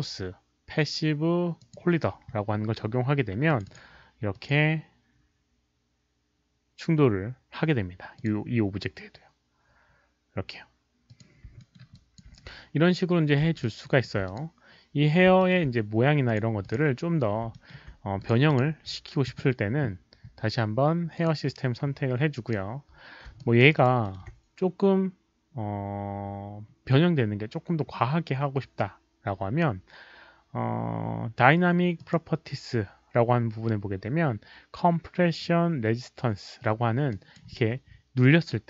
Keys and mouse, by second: 1.5 click, 3.4 click, 4.3 click, 6.1 click, 8.1 click, 11.0 click, 11.5 alt+middle click, 11.9 alt+click, 12.3 q, 13.4 alt+middle click, 13.4 q, 13.6 alt+click, 14.2 alt+click, 15.2 alt+click, 15.3 alt+middle click, 16.2 alt+click, 16.6 alt+click, 16.7 alt+middle click, 17.5 alt+middle click, 18.1 click, 18.4 click, 21.1 alt+click, 23.0 middle click, 23.3 alt+drag, 23.7 alt+right click, 24.0 alt+middle click, 24.1 alt+click, 25.2 alt+middle click, 26.1 alt+middle click, 26.1 alt+right click, 26.1 alt+click, 29.3 alt+right click, 29.3 alt+click, 30.7-31.9 alt+middle drag, 31.9 alt+click, 34.5 click, 34.5 alt+middle click, 37.0 click.